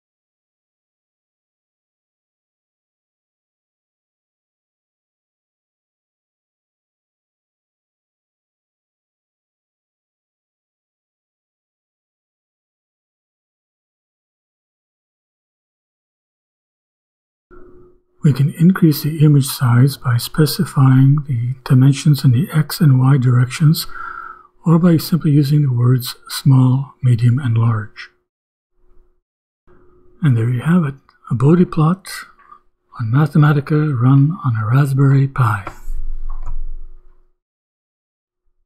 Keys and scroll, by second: 5.2 ,, 5.8 d, 6.3 shift+b, 9.8-14.2 typing, 14.7 shift+Return, 17.9 ,, 18.3 Return, 19.3-25.5 typing, 26.0 shift+Return.